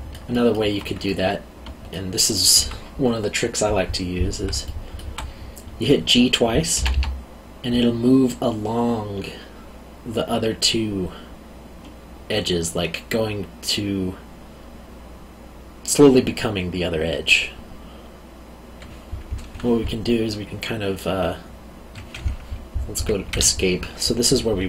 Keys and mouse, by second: 1.0 middle click, 4.6 alt+middle click, 6.7 g, 23.3 Escape.